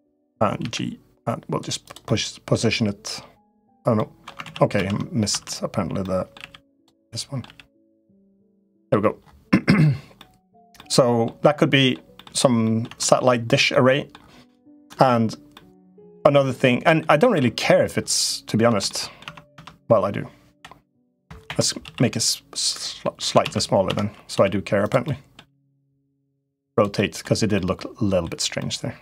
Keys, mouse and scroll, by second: 0.4 g, 1.9 middle click, 2.3 g, 3.8 middle click, 4.2 ctrl+z, 4.5 ctrl+z, 5.1 Tab, 5.8 middle click, 6.1 g, 6.9 middle click, 7.2 g, 8.5 middle click, 10.0 middle click, 10.5 middle click, 11.3 middle click, 12.4 middle click, 12.6 Tab, 13.4 middle click, 14.2 middle click, 15.3 middle click, 16.1 middle click, 17.1 Tab, 18.4 Tab, 18.6 middle click, 19.0 Tab, 19.3 Tab, 20.3 l, 21.2 Escape, 21.6 s, 23.2 ctrl+z, 23.6 Tab, 24.1 s, 24.9 middle click, 25.2 g, 26.0 r, 26.7 middle click, 27.3 middle click, 28.4 middle click, 28.9 3.